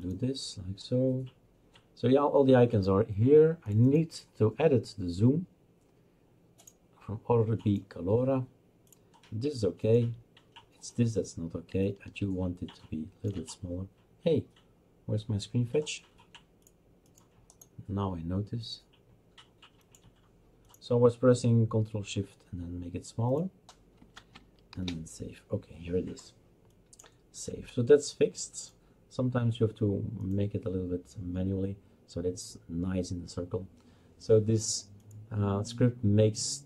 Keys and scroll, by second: 24.7 ctrl+shift+s.